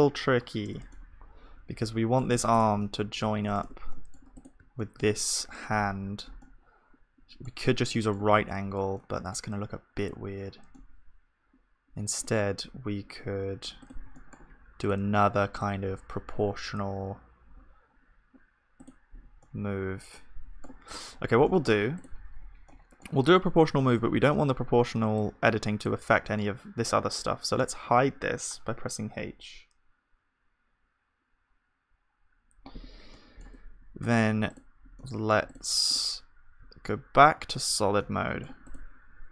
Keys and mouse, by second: 0.6 h, 3.6 Tab, 6.5-14.2 middle drag, 14.2-21.0 drag, 14.2-21.0 right drag, 21.0-23.7 middle drag, 23.7 click, 23.7 right click, 23.7 z, 23.9-27.1 middle drag, 24.2 b, 27.6 h, 33.1-37.5 middle drag, 33.5 Tab, 36.7-37.9 drag, 36.7 z, 38.0-39.3 middle drag.